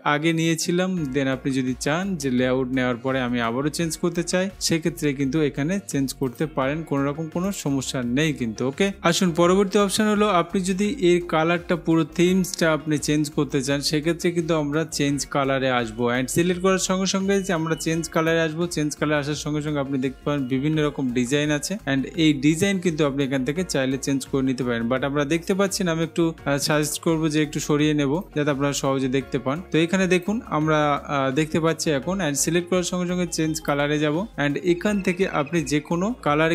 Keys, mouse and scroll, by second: 6.5 scroll, 7.8 click, 18.4-19.4 drag, 27.0 click, 28.3 click, 33.9 click.